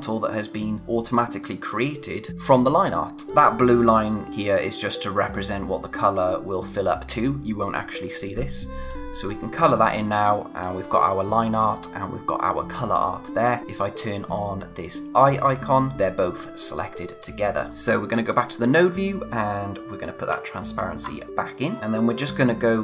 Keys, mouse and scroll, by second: 1.6 click, 3.3 click, 8.8 click, 15.1 click, 21.1 click, 21.8-22.8 scroll up 1.